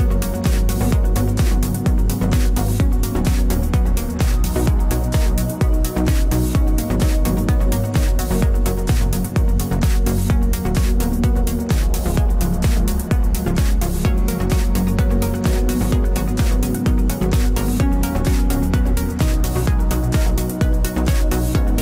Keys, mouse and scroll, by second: 2.0 ctrl+r, 4.9 ctrl+r, 8.5 ctrl+r, 9.9 ctrl+r, 11.3 ctrl+r, 14.1 ctrl+s, 14.8 click, 15.4 KP_Decimal, 15.6 click, 16.5 b, 17.1 g.